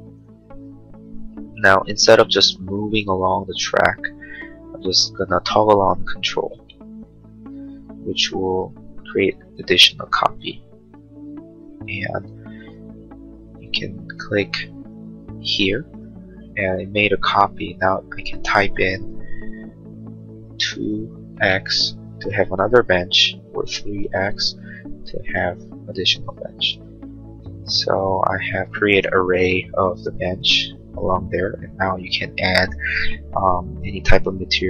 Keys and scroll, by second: 20.6 2, 21.3 x, 21.9 Return, 23.6 3, 24.1 x, 30.6 space.